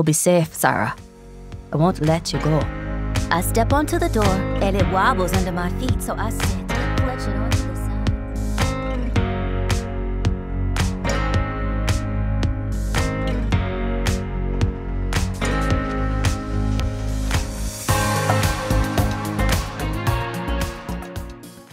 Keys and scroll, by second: 2.3 t, 3.7 t, 4.9 shift+scroll, 6.6 t.